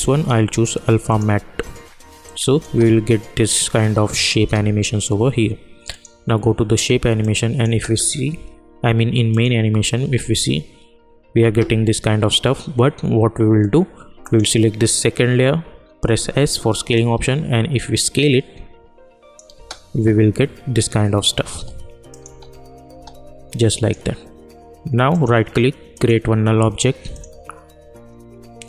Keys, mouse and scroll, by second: 2.6 space, 5.9 click, 7.6 space, 9.3 click, 10.0 space, 14.2 click, 16.0 s, 16.9-19.5 drag, 19.5 space, 21.5 space, 22.1 click, 22.2 space, 23.5-25.1 drag, 25.1 right click, 25.9-28.6 drag.